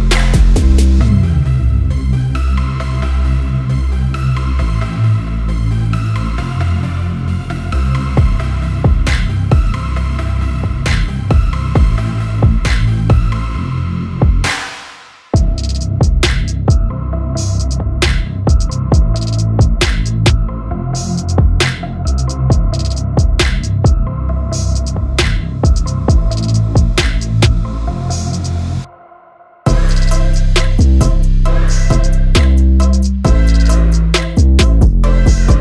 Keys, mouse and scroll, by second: 0.1 ctrl+shift+g, 1.3-8.8 drag, 10.2 shift+click, 10.9 shift+click, 12.1 click, 15.7 ctrl+g, 16.4-18.8 drag, 20.8 ctrl+g, 21.4 click.